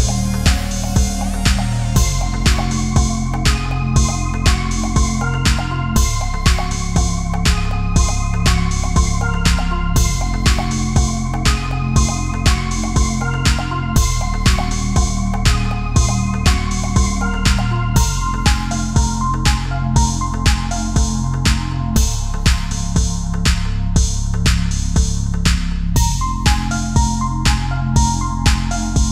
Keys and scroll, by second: 1.1 ctrl+0, 1.8 ctrl+=, 1.9 space, 9.4 Delete, 9.6 Down, 11.2 Down, 12.2 Delete, 12.4 ctrl+z, 12.7 Delete, 15.5 space, 22.1 Delete, 22.4 Right, 22.5 Down, 23.0 space, 23.2 ctrl+-, 23.3 space, 25.1 ctrl+=, 25.2 space, 26.2 Down, 26.4 Right, 27.1 ctrl+a, 27.6 space, 28.0 space, 28.5 space, 28.8 space.